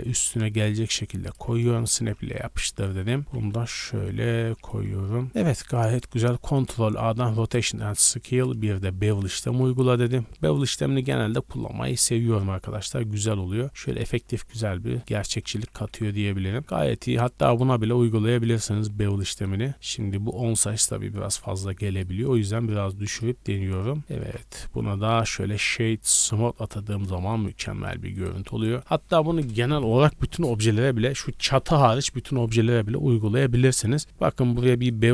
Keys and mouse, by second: 0.0-1.9 drag, 0.4 g, 1.9 shift+middle click, 2.3 z, 2.8 click, 2.9-4.1 middle drag, 2.9 z, 3.2 g, 4.4-7.5 drag, 4.8 Tab, 5.2 a, 5.3 a, 6.1 ctrl+a, 15.5 a, 15.7 a, 16.0 drag, 16.4 click, 16.8-17.2 drag, 17.2 middle drag, 17.5-21.9 drag, 23.9-26.9 ctrl+drag, 24.0 a, 25.1 w, 26.6 a, 26.8 a, 27.1-28.6 shift+drag, 28.1 right click, 28.8-35.1 drag.